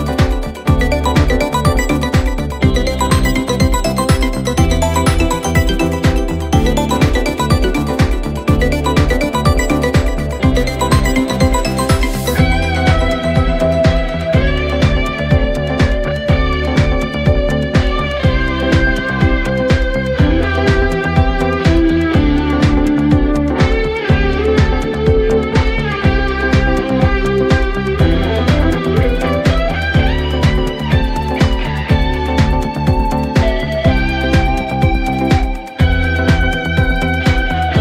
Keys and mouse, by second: 13.8 middle click, 20.4 middle click, 20.7 middle click, 24.1 middle click, 25.1 middle click, 25.3 middle click, 26.1 middle click, 27.5 middle click, 28.3 middle click, 33.3 middle click, 34.3 middle click, 34.7 middle click, 34.9 middle click, 36.9 middle click.